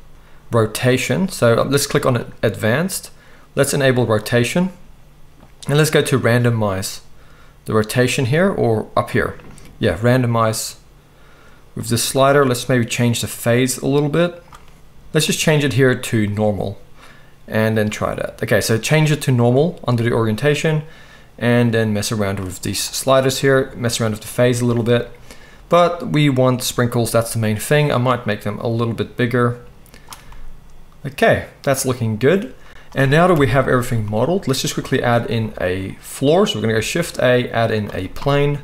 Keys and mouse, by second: 2.3-3.8 middle drag, 3.8-38.6 drag, 33.3 KP_1, 36.6 shift+a.